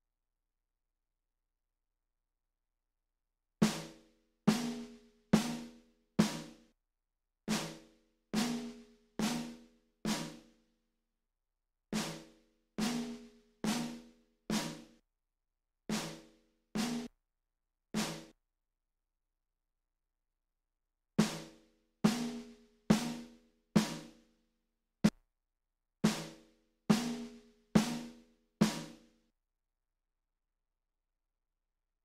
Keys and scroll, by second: 3.3 space, 6.8 space, 7.1 space, 11.3 space, 15.1 space, 15.5 space, 17.1 space, 18.5 space, 20.8 space, 25.1 space, 25.7 space, 29.4 space.